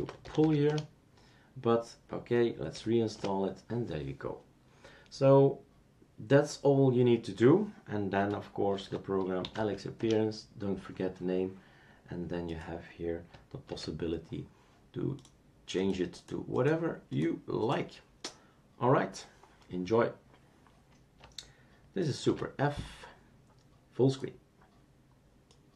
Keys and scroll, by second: 0.0-1.0 typing, 2.5-3.2 typing, 8.7 super+d, 9.2-10.0 typing, 13.7 super+f, 22.2 super+f.